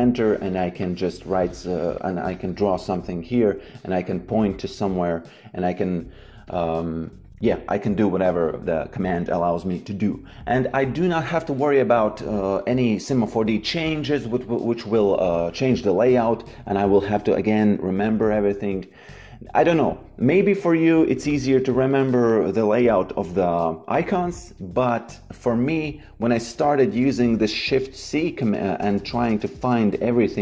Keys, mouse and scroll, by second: 0.1 click, 6.4 click, 6.9 Delete, 21.2 click, 26.8-29.0 typing.